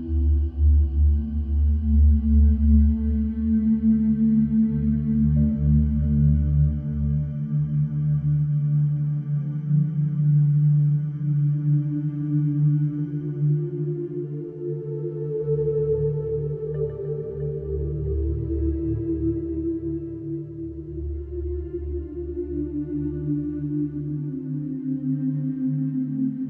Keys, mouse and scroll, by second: 1.5 middle click, 5.0 click, 6.7 click, 8.4 click, 13.2 click, 13.9 click, 17.9 click, 21.1 alt+middle click, 23.7 click, 24.4 middle click, 25.0 click.